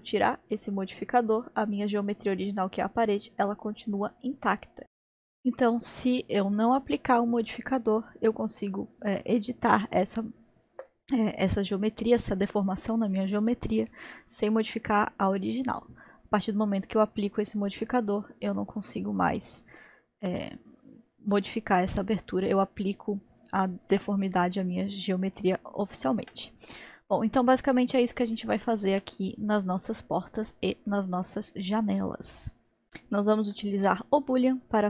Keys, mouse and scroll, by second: 1.5 click, 4.8-7.4 middle drag, 7.4-13.5 drag, 18.8 click, 19.7-22.2 middle drag, 22.2 click, 23.9 Delete, 24.6-26.9 middle drag, 26.9-28.3 scroll up 1, 28.4-32.8 shift+middle drag, 33.8-34.8 middle drag.